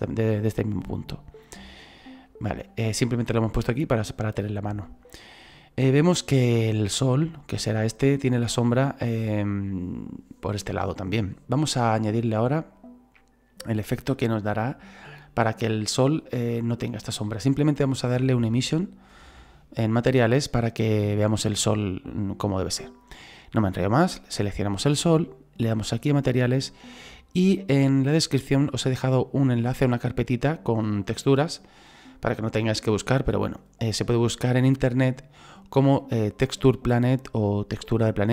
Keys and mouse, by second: 2.2 shift+middle click, 23.4 right click, 26.3 click.